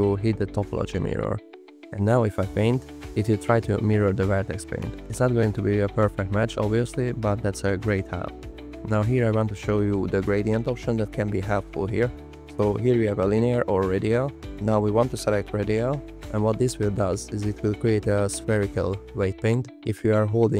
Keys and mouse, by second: 0.4 click, 3.7 alt+click, 5.6 click, 7.0-8.2 drag, 10.3 t, 11.8 click, 13.0 click, 13.5 click, 14.0 click, 19.2 click.